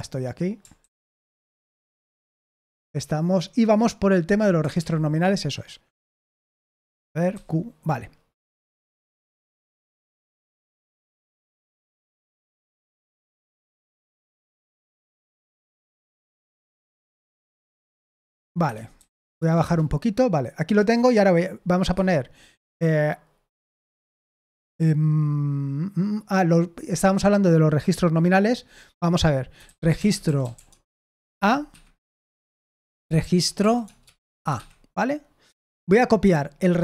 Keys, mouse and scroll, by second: 0.7 ctrl+d, 2.6 ctrl+d, 4.7 super+l, 7.3 q, 9.1 typing, 12.0 typing, 13.9-15.8 typing, 16.9 f, 17.4 Escape, 17.6 d, 18.1 shift+g, 18.6 Escape, 18.9 i, 19.3 Return, 19.6 Return, 21.9 Escape, 23.5 i, 29.3-34.2 typing, 31.6 Escape, 34.5 Escape, 36.2 typing.